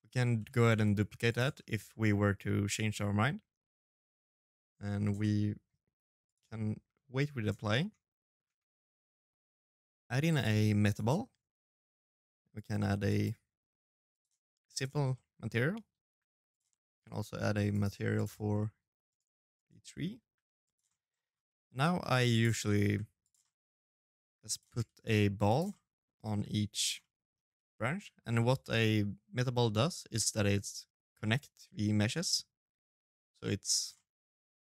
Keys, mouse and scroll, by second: 0.3 middle click, 0.9-1.4 scroll down 3, 1.4 right click, 1.6-2.3 scroll up 5, 4.0 middle click, 5.0 click, 6.5 Tab, 8.8 shift+a, 11.3 click, 13.9 middle click, 14.8 g, 15.7 right click, 16.5 click, 17.3 middle click, 17.9 right click, 18.6 middle click, 18.9 g, 19.6 middle click, 19.9 scroll down 1, 20.0-20.4 scroll up 5, 20.2 middle click, 20.5 scroll down 2, 20.8 s, 21.3 scroll up 1, 21.3 middle click, 21.6 g, 22.2 middle click, 23.0 g, 23.7 shift+d, 24.5 middle click, 25.0 g, 25.7 middle click, 26.3 middle click, 27.0-27.6 scroll up 4, 28.5 middle click, 29.0 shift+d, 32.7 middle click, 33.4 g, 34.1 middle click.